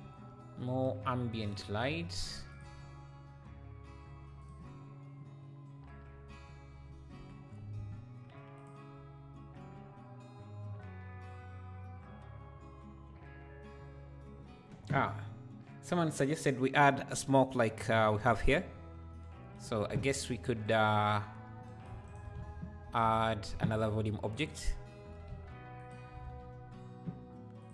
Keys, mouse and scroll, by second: 0.4 scroll down 1, 1.5 click, 1.9 r, 7.2 KP_7, 7.8 shift+d, 22.1-25.1 shift+right drag, 25.1 s, 26.3 ctrl+a.